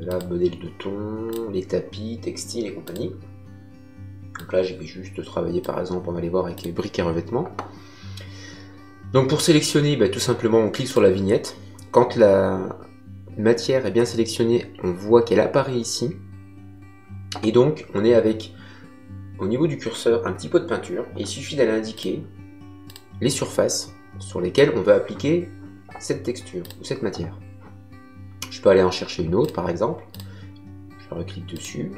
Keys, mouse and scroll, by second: 2.8 click, 4.3 click, 6.5 click, 10.8 click, 21.9 click, 26.6 click, 29.4 click.